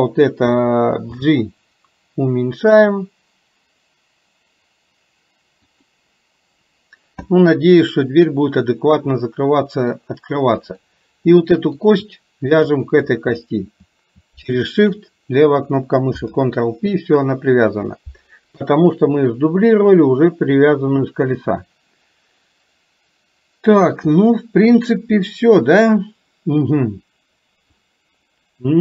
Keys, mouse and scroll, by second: 1.1 g, 7.4 scroll up 1, 7.6-10.0 middle drag, 10.8 click, 11.4 middle click, 12.7 click, 14.5 shift+click, 16.2 ctrl+p, 18.5 KP_3.